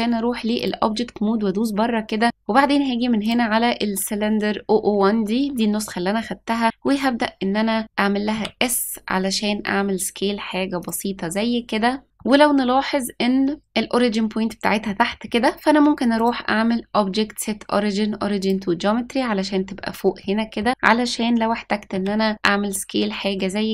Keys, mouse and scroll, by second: 0.5 click, 2.2 click, 3.2 click, 8.2 s, 12.1-13.6 middle drag, 14.8 middle click, 16.1-18.4 drag, 20.1 middle click, 21.8 s.